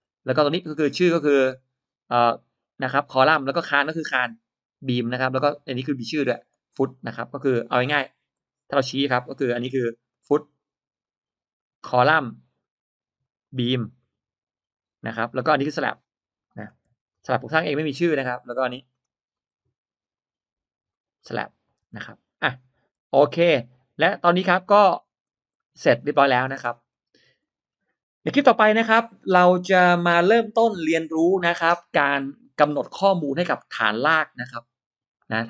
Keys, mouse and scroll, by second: 0.2 middle click, 0.7 click, 1.1 click, 3.5 click, 5.1 click, 6.8 click, 8.2 click, 9.2 click, 9.8 click, 10.9 click, 11.4 click, 11.7 click, 12.5 click, 13.1 click, 13.3 click, 13.9 click, 14.6 click, 16.3 middle click, 16.8 e, 17.0 click, 18.8 click, 19.2 click, 20.0 click, 20.8 click, 21.0 click, 21.8 middle click, 21.8 space, 22.9 e, 23.1-24.1 drag, 24.4 click, 24.9 scroll down 1, 25.4 middle click, 26.0-26.8 scroll up 2, 26.6 middle click, 26.8-27.3 scroll down 1, 27.3 middle click, 27.8 scroll up 1, 28.5-28.8 scroll down 1, 28.8 middle click.